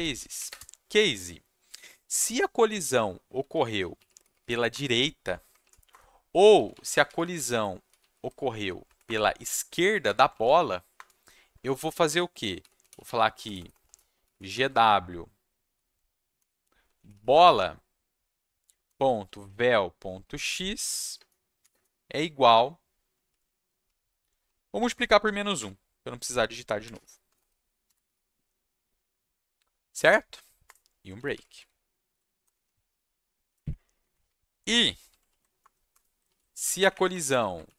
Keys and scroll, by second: 0.0-0.8 typing, 3.5-8.5 typing, 5.9 Return, 8.8 Down, 9.0 Return, 10.3 shift+/, 10.9 Return, 11.5 Tab, 12.3-15.0 typing, 16.1-21.7 typing, 23.1 Left, 23.3 Left, 23.4 Left, 24.6 Left, 24.7 Left, 25.6-28.5 typing, 30.6 Return, 30.9-33.4 typing, 33.4 shift+Up, 33.6 shift+Up, 34.0 shift+Up, 35.1 ctrl+c, 35.2 ctrl+v, 35.6 Return, 35.9 BackSpace, 36.2 ctrl+v, 36.6 Up, 36.7 Up, 36.9 Up, 37.1 Right, 37.2 Right, 37.6 ctrl+alt+shift+Left.